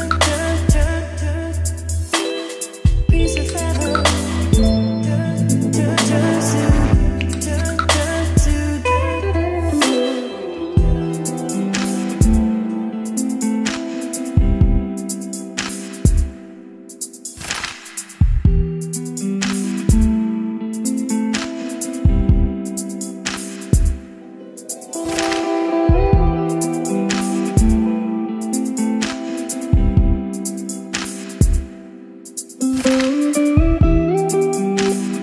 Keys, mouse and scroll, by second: 1.3-35.2 drag.